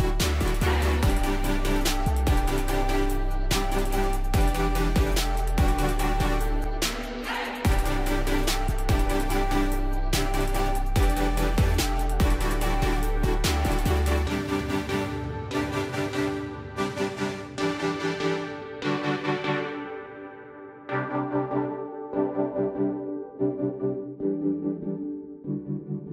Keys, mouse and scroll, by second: 1.0 shift+click, 2.2 shift+click, 3.1 shift+click, 4.6 click, 6.3 alt+click, 7.6 ctrl+click, 10.0-18.6 drag, 21.3 ctrl+click, 23.2-26.1 drag.